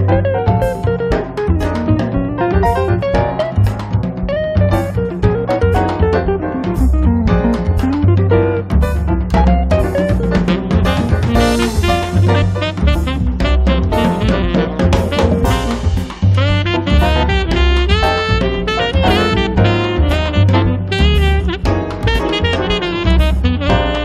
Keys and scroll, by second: 0.1 3, 0.7 0, 7.3 m, 10.0 m, 11.5 Up, 12.4 Up, 20.5 space.